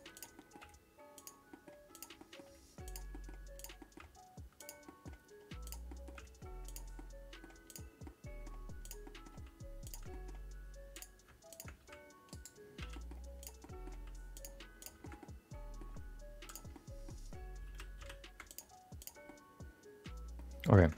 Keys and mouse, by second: 0.1 click, 0.5 middle click, 0.6 g, 1.6 middle click, 1.9 click, 2.1 middle click, 2.5 g, 3.2 middle click, 3.5 click, 3.9 middle click, 4.0 g, 4.9 middle click, 5.6 click, 5.8 middle click, 6.1 g, 6.9 middle click, 7.6 click, 8.0 middle click, 8.8 click, 9.0 middle click, 9.3 g, 10.2 middle click, 10.9 click, 11.5 shift+click, 11.8 g, 12.8 f, 12.9 middle click, 13.4 click, 13.6 middle click, 13.9 g, 14.8 click, 15.0 shift+middle click, 15.2 middle click, 15.9 g, 16.8 middle click, 17.6 r, 19.0 click, 19.2-20.4 middle drag.